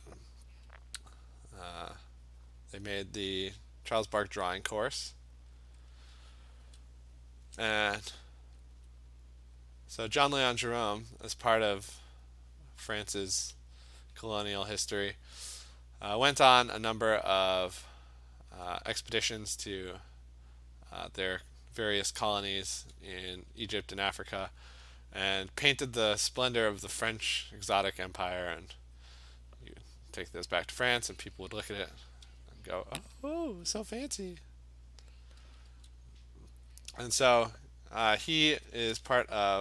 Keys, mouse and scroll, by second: 0.0 click, 1.9 click, 2.5 click, 3.9 click, 4.0 ], 4.3 ], 4.7 click, 5.2 click, 5.4 click, 5.7 click, 5.9 click, 8.8 alt+click, 10.2 click, 10.5 click, 10.8 click, 11.5 click, 12.0 click, 12.8 click, 13.5 alt+click, 15.3 click, 15.7 click, 18.6 click, 19.1 alt+click, 19.3 alt+click, 21.0 click, 22.5 alt+click, 23.2 alt+click, 25.9 alt+click, 26.6 [, 26.9 [, 27.6 click, 28.1 click, 28.5 click, 29.1 click, 29.2 alt+click, 29.6 click, 29.8 click, 30.1 click, 30.3 click, 30.9 click, 31.1 click, 31.6 ], 31.8 ], 32.1 ], 33.3 alt+click, 34.6 click, 35.1 click, 35.4 [, 35.7 [, 36.3 click, 36.8 click, 38.1 alt+click.